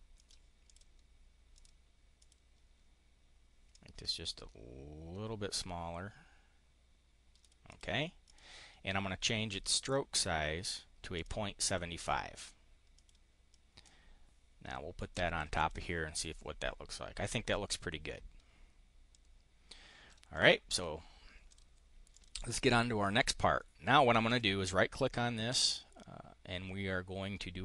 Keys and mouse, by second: 0.1 click, 0.6 click, 1.4 click, 2.1 click, 3.7-7.4 ctrl+drag, 7.6 click, 8.2 click, 9.7 click, 11.1 click, 11.6 click, 12.9 click, 13.4-15.4 drag, 15.5 click, 19.0-20.1 drag, 20.2 click, 20.7 click, 21.4 click, 22.0 click, 24.1 click, 25.5-27.6 right drag.